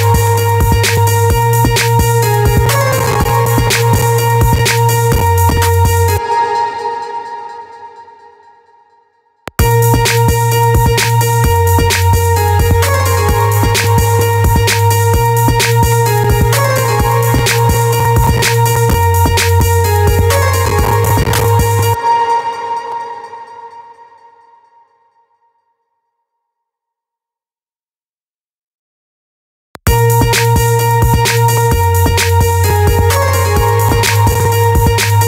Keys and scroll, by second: 5.6 space, 8.9 space, 21.3 space, 29.1 space.